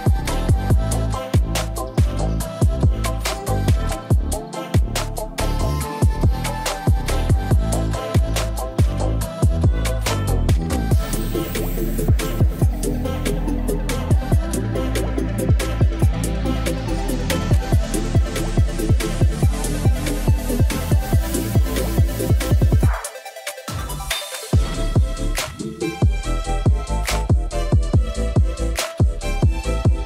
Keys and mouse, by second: 0.7 click, 2.6 middle click, 5.1-7.8 drag, 6.8 0, 13.5 middle click, 14.2 g, 14.8 shift+z, 16.5 click, 18.0-18.4 middle drag, 18.6 shift+middle click, 18.9-19.5 middle drag, 20.0 KP_0, 21.1 ctrl+s, 21.2 click, 22.6 click, 23.3 drag, 24.0 click, 29.7 ctrl+s.